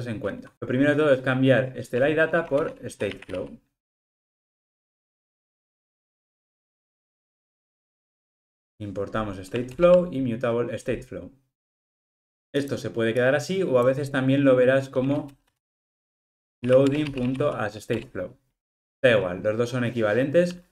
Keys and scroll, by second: 7.6 alt+Return, 17.0 Return.